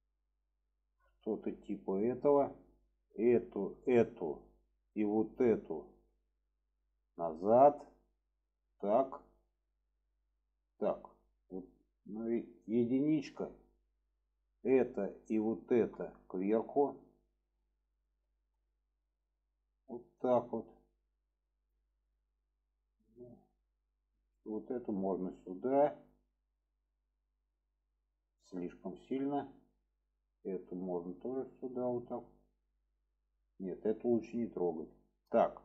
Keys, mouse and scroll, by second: 1.9 middle click, 2.7 click, 3.8-4.4 middle drag, 5.1 shift+click, 5.7 shift+click, 6.1-6.7 middle drag, 7.3-8.6 drag, 8.8-9.9 middle drag, 15.4 shift+click, 16.0-17.4 middle drag, 18.0-18.5 alt+middle drag, 19.7 click, 21.9 click, 22.3-23.3 middle drag, 23.9 click, 24.3 middle click, 25.0 click, 26.2-26.7 middle drag, 26.8-27.9 middle drag, 28.4 click, 29.3-29.6 middle drag, 30.4 click, 31.0 click, 32.2-32.8 middle drag, 34.1 ctrl+z, 34.7 click, 35.0 middle drag.